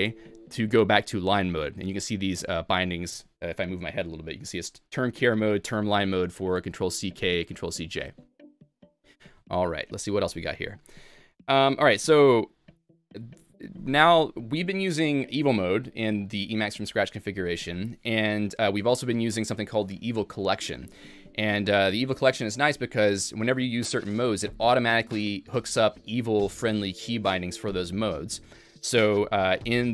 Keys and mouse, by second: 12.8-13.6 typing.